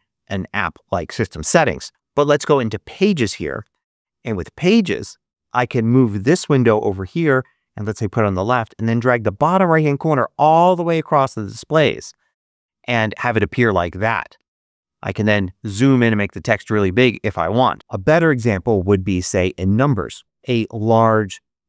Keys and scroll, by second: 17.7 super+q.